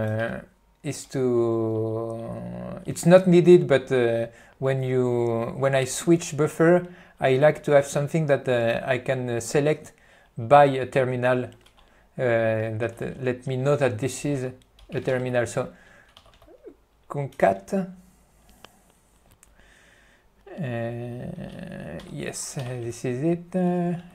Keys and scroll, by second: 13.1 ., 16.7 BackSpace, 17.7 ., 22.1 ctrl+g, 22.8 b.